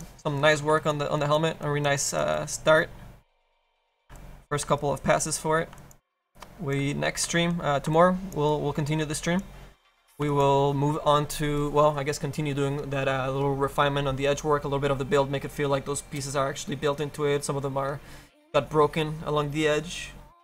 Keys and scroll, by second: 1.3 F7, 3.4 f, 7.5 f.